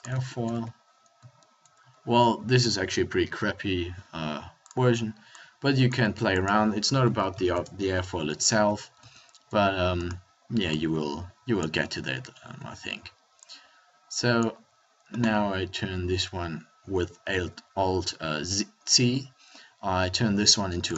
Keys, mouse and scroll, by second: 0.5 Tab, 1.8 Tab, 2.3 Tab, 8.5 Tab, 11.6 Tab, 12.5 Tab, 14.5 Tab, 17.3 alt+c.